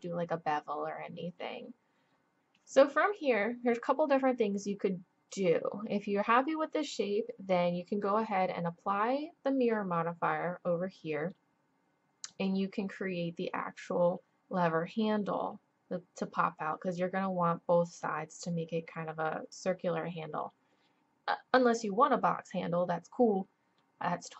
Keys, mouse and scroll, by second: 1.4 middle click, 11.3-14.0 drag, 14.0-20.0 middle drag.